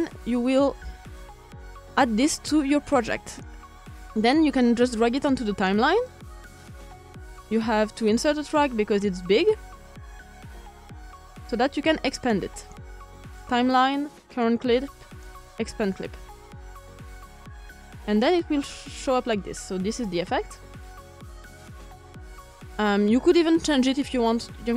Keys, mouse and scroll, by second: 2.4-3.7 drag, 4.7-12.2 drag, 13.3-14.9 drag, 15.8-17.5 drag, 18.5-22.0 drag, 22.0-22.3 ctrl+scroll up 1.